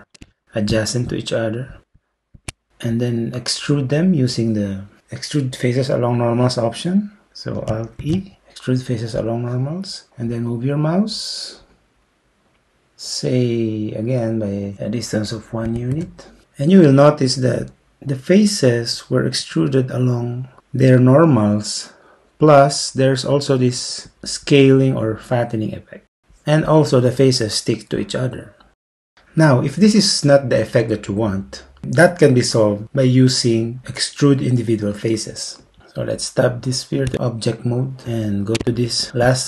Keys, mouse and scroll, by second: 8.0 alt+e, 15.7 1, 15.9 Return, 37.1 Tab.